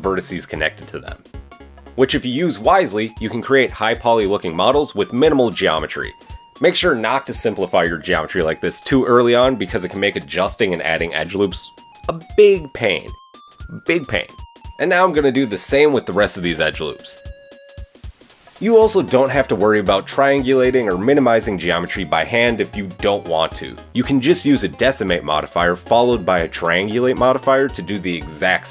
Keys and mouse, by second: 0.4 shift+click, 0.9 click, 0.9 j, 1.4 shift+click, 2.2 j, 3.1 a, 8.4 alt+click, 9.1 alt+shift+click, 10.1 alt+shift+click, 11.2-17.1 drag, 16.1 alt+shift+middle click, 16.1 alt+shift+right click, 17.7 x, 21.3 ctrl+z, 21.3-23.1 typing, 21.7 shift+click, 22.0 shift+click, 22.2 shift+click, 22.6 shift+click, 23.2 Tab, 23.8-25.2 drag, 23.8 middle click, 23.8 right click, 24.0 Tab, 25.5 Tab, 25.7 Tab, 26.9 KP_7, 27.0 KP_1, 27.2 KP_3, 28.4 shift+a, 28.5 middle click.